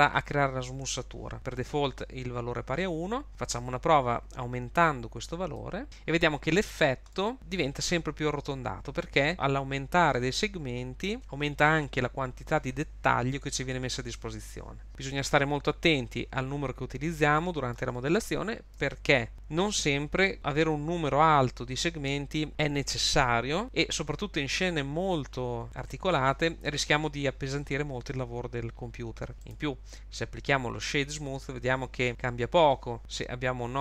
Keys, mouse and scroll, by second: 5.6 click, 5.8 middle click, 5.8 scroll down 2, 7.1 shift+middle click, 10.9-12.4 scroll down 2, 14.9 click, 17.4 middle click, 18.2 shift+middle click, 29.3 super+z, 29.4 right click, 31.4 middle click.